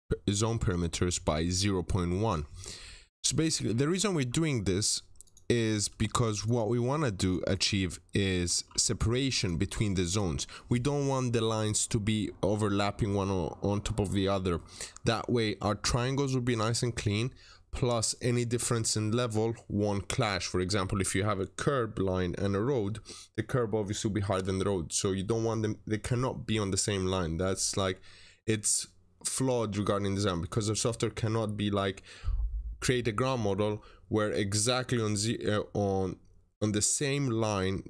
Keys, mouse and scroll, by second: 3.2-3.5 scroll up 1, 5.1 click, 5.8 Escape, 6.3 click, 6.7 Delete, 7.1 click, 7.4 double click, 8.0 Escape, 8.9 click, 9.3 double click, 10.0 click.